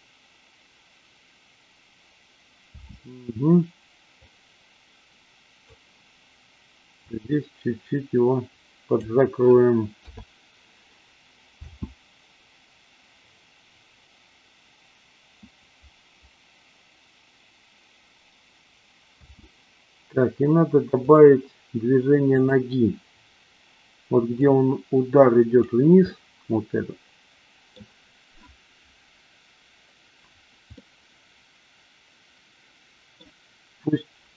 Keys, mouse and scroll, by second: 2.6 space, 4.2-5.8 drag, 7.1-9.0 drag, 10.0 i, 11.5 space, 19.1 space, 21.0 click, 22.3-23.0 drag, 24.4-25.6 drag, 26.0-27.8 middle drag, 30.8-33.3 middle drag.